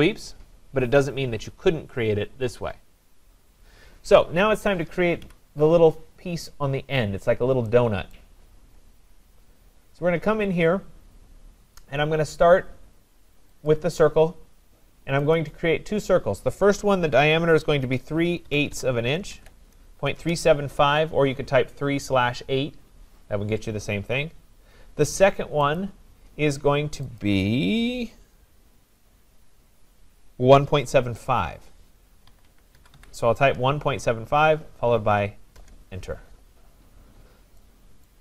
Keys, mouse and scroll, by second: 5.3 Delete, 6.2-7.7 scroll, 8.2 right click, 8.3-9.7 scroll, 9.9-10.4 scroll, 13.7 click, 15.4 click, 17.9-19.8 typing, 20.2 Return, 25.7 click, 27.2 click, 32.1-33.5 typing, 35.6 Return, 37.0-37.6 scroll, 38.1 right click.